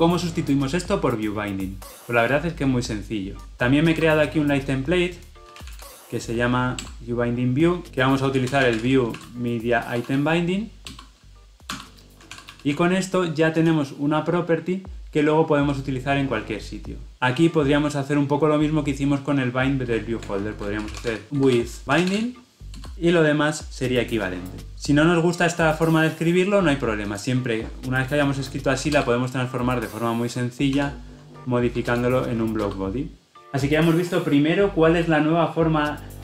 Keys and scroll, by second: 6.8 Return, 7.9 ctrl+z, 10.8 ctrl+z, 10.9 Return, 12.2 ctrl+alt+l, 14.7 ctrl+alt+o, 17.2 ctrl+z, 22.7 Return, 28.9 alt+Return.